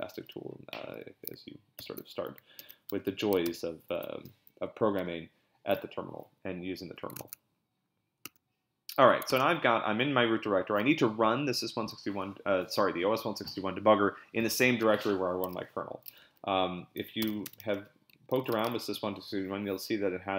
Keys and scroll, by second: 1.8 ctrl+c, 2.6 ctrl+b, 2.9 p, 3.4 ctrl+c, 7.2 super+Tab, 9.3 super+Tab, 15.8-19.0 typing.